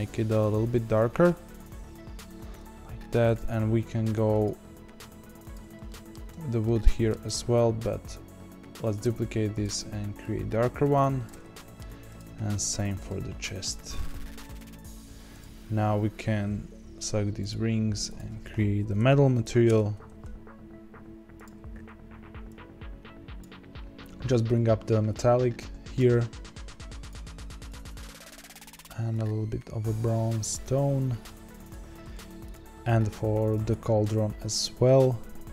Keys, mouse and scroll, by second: 3.3 click, 5.5 click, 5.8 shift+middle click, 6.3 scroll up 2, 6.6-9.0 middle drag, 9.0 click, 10.1 click, 11.5 shift+middle click, 12.1 click, 13.7-15.3 drag, 17.4 click, 17.9 click, 18.0-21.7 drag, 23.8 click, 25.2-26.6 drag, 27.6 click, 32.4 click, 34.6 click, 35.0-35.4 scroll down 1, 35.4-35.5 middle drag.